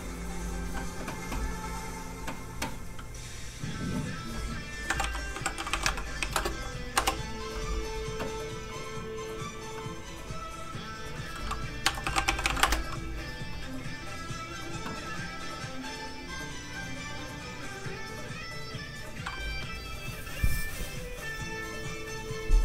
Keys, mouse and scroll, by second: 4.8-6.3 typing, 6.9 Return, 8.9-9.4 scroll down 1, 10.1-10.7 scroll up 1, 10.7 click, 11.8-12.6 typing, 14.9-15.4 scroll down 1, 18.4 click.